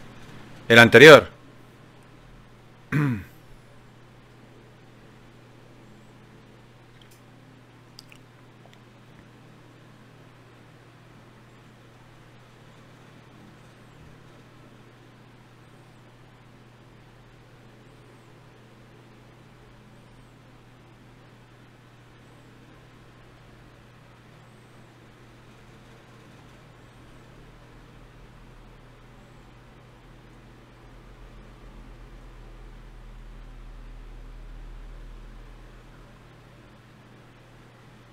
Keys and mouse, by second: 5.1 F6, 11.5-16.2 middle drag, 16.2-21.6 right drag, 21.6 middle click, 22.3 right click, 22.4-25.0 drag, 25.0 ctrl+r, 25.9 middle click, 26.2-27.2 right drag, 27.2 g, 28.2-30.3 middle drag, 30.3 click, 30.9 shift+q, 33.7 F6.